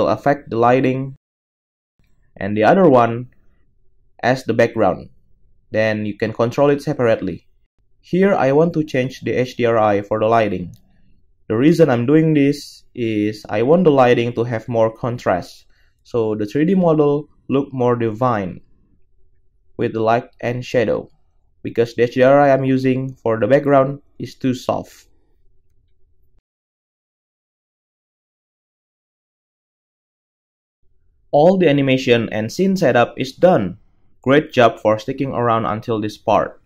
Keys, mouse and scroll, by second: 17.5-21.3 middle drag, 21.3-36.6 drag, 32.5 KP_0.